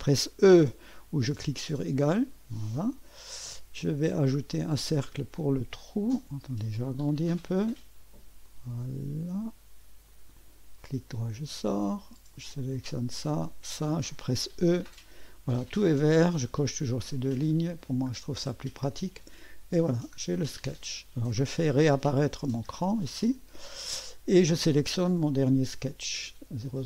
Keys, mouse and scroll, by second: 1.7 e, 4.5 click, 6.4-6.8 scroll up 1, 6.8 right click, 8.4 click, 8.8 click, 10.1 click, 10.8 middle click, 12.3 click, 13.5 click, 14.7 typing, 18.9-19.9 drag, 22.2 click, 22.6 typing, 23.3 click, 25.3 click, 26.6 click.